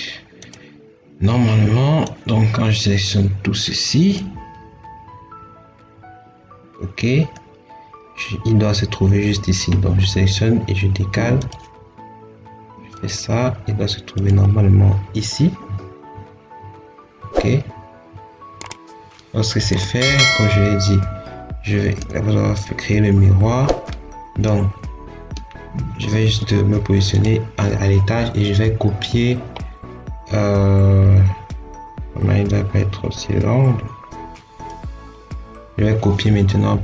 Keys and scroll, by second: 25.7 Escape.